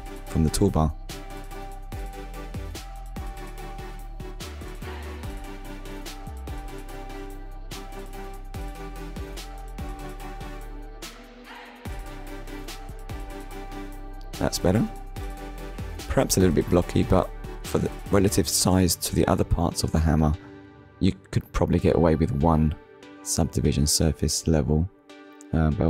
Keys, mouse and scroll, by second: 6.3 click, 7.0 click, 7.5 Tab, 7.9 click, 8.3 scroll down 1, 8.9 middle click, 12.0 shift+middle click, 12.5 middle click, 13.3 scroll up 1, 14.0-14.4 scroll up 2, 14.4 shift+middle click, 17.3-17.8 scroll down 2, 18.3 middle click, 19.8 KP_1, 20.8 shift+middle click, 23.3 click.